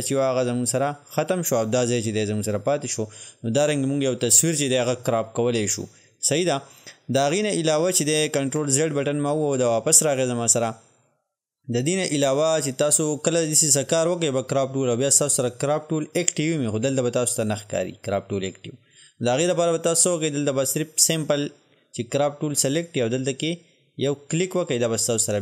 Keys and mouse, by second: 8.5 ctrl+Num_Lock, 8.6 ctrl+z, 24.4 click.